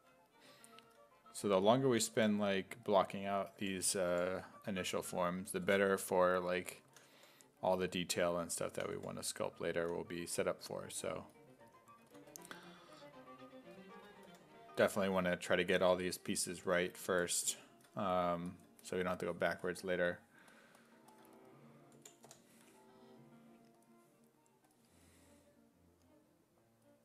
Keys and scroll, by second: 0.9-5.7 typing, 6.9 s, 7.2 5, 8.5-10.6 typing, 12.0 s, 12.3 1, 14.3 5, 22.0 b, 22.3 i.